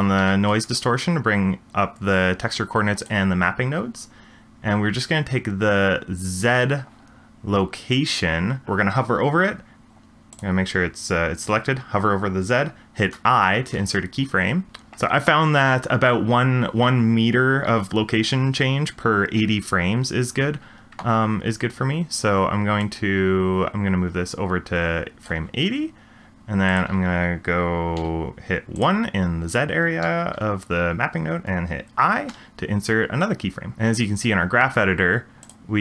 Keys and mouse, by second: 0.2 ctrl+t, 3.0 click, 10.3 click, 13.7 i, 14.7 ctrl+z, 23.0-25.3 drag, 26.7-28.8 drag, 33.7 middle click, 35.4 click.